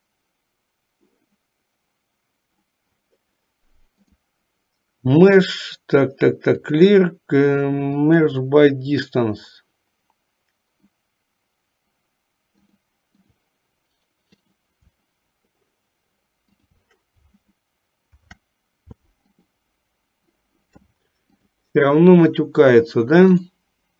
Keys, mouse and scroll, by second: 4.2-8.2 drag, 12.7 click, 14.6 click, 18.2 ctrl+p, 21.5 click, 23.5 click.